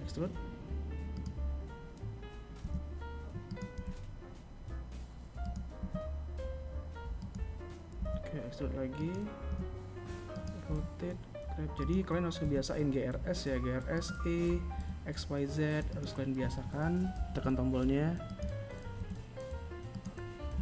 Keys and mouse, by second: 0.7 r, 1.8 g, 3.9 s, 6.1 e, 7.5 r, 8.7 g, 10.4 s, 12.8 g, 15.3 r, 17.1 g, 18.6 e.